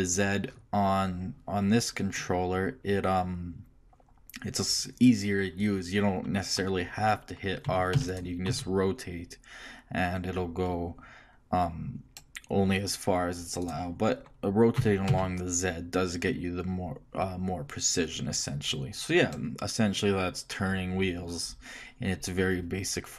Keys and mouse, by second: 7.7 r, 8.5 r, 14.8 r.